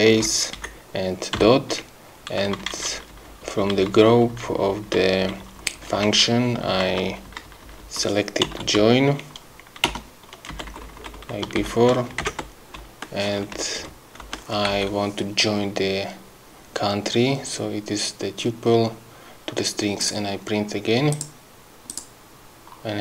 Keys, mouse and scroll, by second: 0.2 Left, 0.6 Right, 2.4 Down, 8.2-9.1 typing, 9.9 Return, 10.5 Left, 11.6 shift+End, 12.2 ctrl+shift+v, 12.8 ctrl+Left, 14.2 BackSpace, 14.7 End, 20.0 click, 21.1 click, 21.9 click.